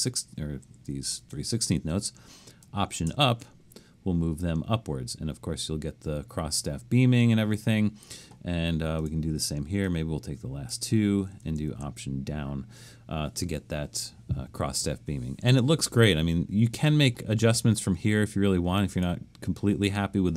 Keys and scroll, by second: 1.0 shift+Left, 3.1 alt+Up, 11.6 alt+Down.